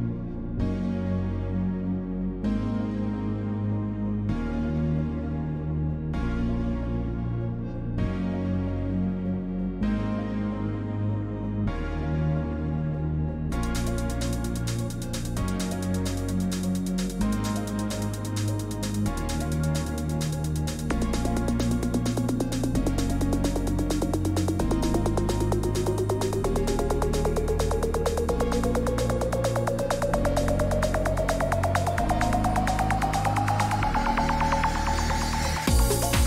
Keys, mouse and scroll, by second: 0.0 click, 1.8 click, 2.6 click, 3.8 click, 5.5 click, 5.7 Escape, 6.8 click, 8.6 click, 9.7 click, 10.6 click, 13.1 click, 14.0 1, 14.0 Return, 15.5 middle click, 15.7 scroll, 15.9-36.2 typing, 16.7 middle click, 17.7 click, 19.8 click, 23.1 click, 24.5 click, 24.8 click, 25.3 click, 26.2 click, 27.3 click, 28.0 click, 28.5 click, 28.9 click, 29.8 click, 30.5-31.1 scroll down 5, 31.7-33.7 click, 32.9-33.6 scroll down 7, 33.7-34.0 scroll, 35.2-36.2 scroll.